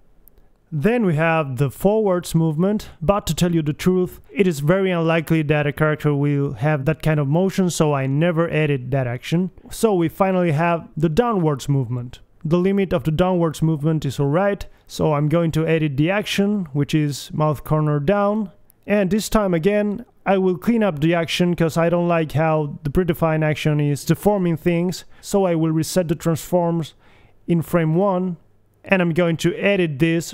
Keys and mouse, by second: 0.1 click, 0.4 KP_1, 0.8 alt+g, 4.0 g, 6.3 middle click, 7.1 alt+g, 8.0 g, 10.0 KP_1, 10.8 g, 12.5 click, 13.9-15.1 middle drag, 15.1 KP_1, 15.4 g, 21.6 middle click, 22.9 Right, 23.4 KP_1, 24.9 Left, 25.3 Right, 27.4-30.3 drag, 28.9 a, 29.1 a.